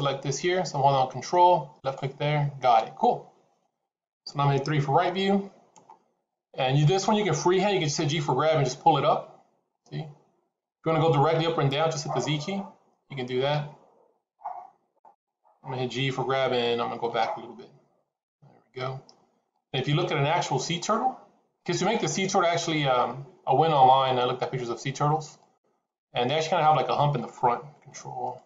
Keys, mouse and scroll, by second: 1.7 ctrl+click, 4.9 KP_3, 5.7 scroll up 5, 6.4-6.9 scroll down 3, 7.9 g, 15.8 g, 20.7 middle click, 25.3 click, 28.1 ctrl+click.